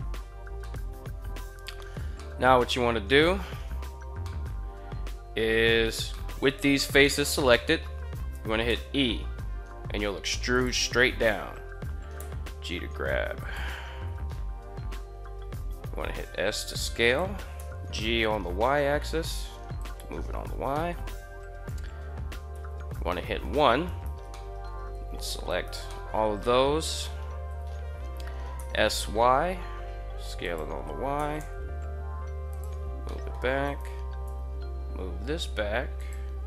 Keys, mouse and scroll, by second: 0.4-0.7 shift+middle drag, 1.9-2.2 shift+middle drag, 3.9-4.3 shift+middle drag, 5.9 middle drag, 7.3 KP_1, 8.5 e, 10.3 click, 12.0 g, 13.2 click, 13.8 KP_3, 15.4 s, 16.8 click, 17.2 g, 17.4 y, 19.6 click, 20.6 shift+middle click, 22.2 1, 22.9-23.2 middle drag, 23.6 alt+right click, 24.1-24.4 middle drag, 25.2 alt+shift+right click, 25.7 middle click, 26.1 middle click, 27.3 KP_3, 28.3 s, 28.7 y, 30.2 click, 30.9 g, 31.2 y, 32.1 click, 32.9 shift+middle drag, 33.4 right click, 34.0 g, 35.8 drag, 36.4 right click.